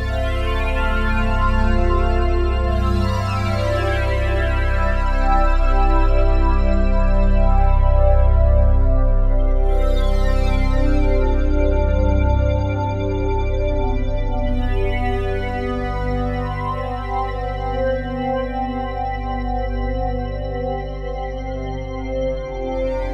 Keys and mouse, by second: 6.1 ctrl+s, 11.4 click, 13.4 click, 15.2 click, 16.7 click, 18.5 click, 20.5 ctrl+s.